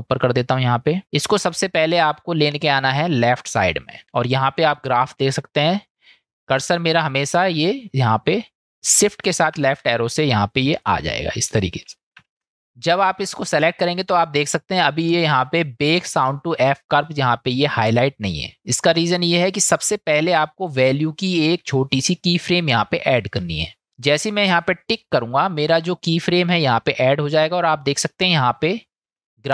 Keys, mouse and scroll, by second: 0.0 click, 1.1-3.6 drag, 4.7 middle click, 6.5 click, 9.6 ctrl+shift+Left, 10.8-11.3 drag, 12.2 shift+Left, 12.7-19.3 drag, 19.5 click, 25.0 click.